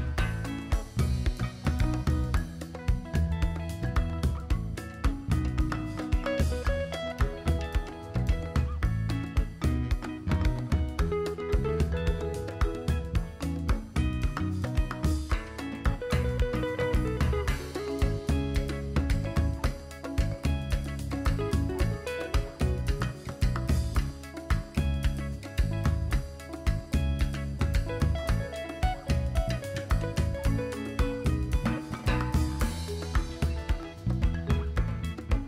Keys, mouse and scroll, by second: 1.0 KP_7, 1.6 shift+c, 2.9 scroll up 2, 3.0-3.4 shift+middle drag, 3.6-4.3 scroll up 3, 4.4 super+c, 4.5 super+v, 5.6-7.6 drag, 8.3 KP_7, 8.9 KP_1, 10.0 click, 10.9 click, 12.0 click, 13.0-13.4 scroll up 4, 13.5-13.9 shift+middle drag, 15.2 r, 23.1 click, 27.0 KP_7, 29.5 `, 30.7 r.